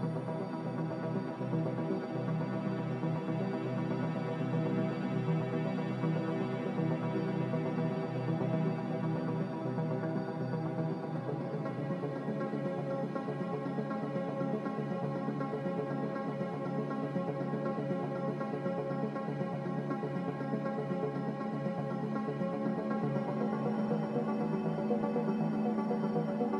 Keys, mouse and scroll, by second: 13.8 Delete, 22.5 Delete.